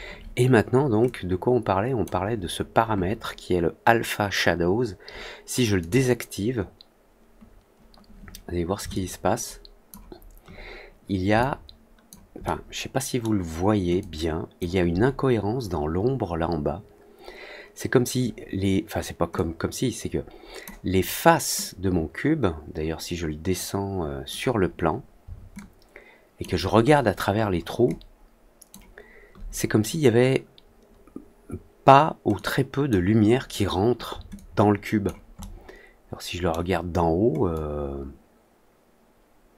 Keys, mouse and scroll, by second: 1.0-2.0 drag, 5.7 click, 8.8-9.8 alt+drag, 11.3 alt+click, 12.4 alt+middle click, 13.9 alt+click, 19.3-20.6 drag, 21.5-24.2 drag, 25.5 alt+click, 26.8 alt+middle click, 27.3 alt+middle click, 27.8 alt+click, 32.3 click, 34.3-35.0 alt+drag, 35.3-36.4 alt+middle drag, 37.4-39.5 alt+drag.